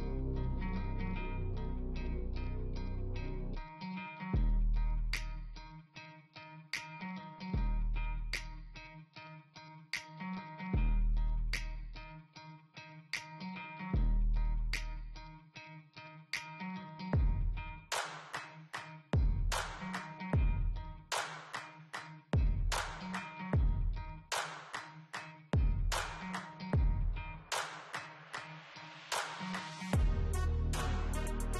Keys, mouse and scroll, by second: 0.6 scroll up 1, 3.8 scroll down 1, 6.6 scroll down 1, 8.2 scroll up 1, 13.0 scroll down 1, 14.1 scroll up 1, 21.5-23.5 typing.